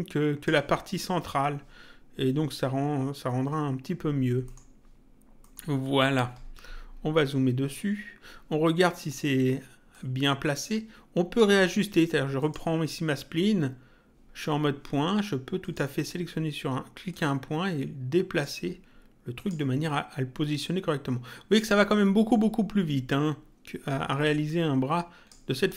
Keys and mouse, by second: 4.4 middle click, 5.4 middle click, 9.8 click, 12.3 click, 15.5 click, 17.0 click, 19.3 click, 20.5 click, 24.4 click.